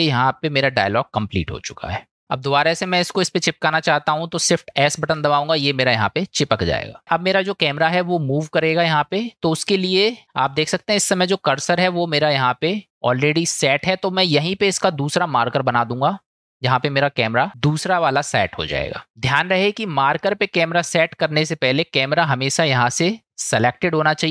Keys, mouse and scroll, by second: 5.0 shift+s, 15.8-17.5 drag, 22.6 click.